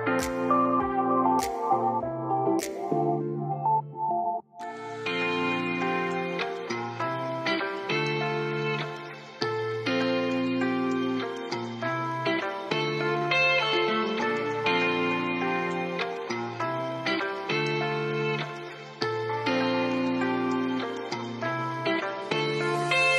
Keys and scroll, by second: 13.4 ctrl+s, 18.6 ctrl+s.